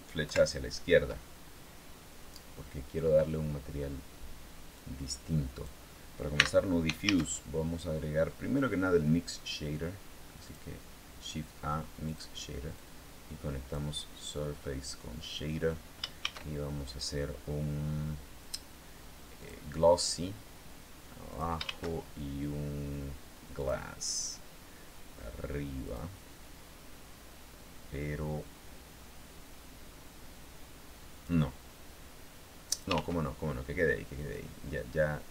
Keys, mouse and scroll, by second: 0.0 ctrl+Left, 4.5-5.6 drag, 6.1 x, 6.8 shift+a, 10.2 click, 11.8 click, 12.5 click, 14.4-15.6 middle drag, 16.0 shift+a, 19.1 click, 21.1 click, 21.4 shift+a, 23.3 click, 25.6 click, 31.0-32.8 drag, 32.7 ctrl+z, 34.1-35.3 drag.